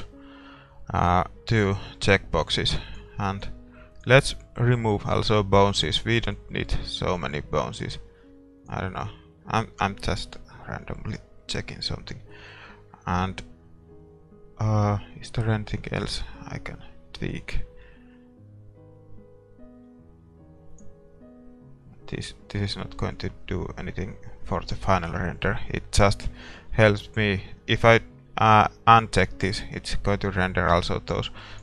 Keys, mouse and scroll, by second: 2.6-5.8 drag, 6.3-8.0 drag, 8.7-10.4 drag, 10.5 click, 10.6-14.9 middle drag, 20.7-25.8 drag, 22.3-26.2 middle drag, 26.2 scroll up 1, 26.4-28.9 middle drag, 28.9-30.7 drag, 31.5-31.6 drag.